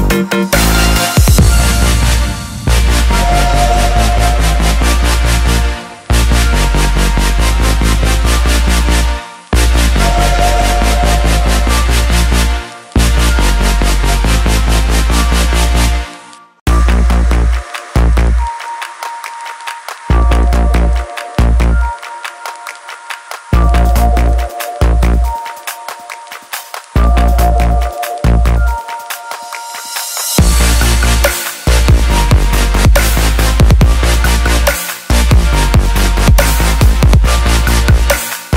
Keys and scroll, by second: 22.3 j, 29.7 ctrl+j.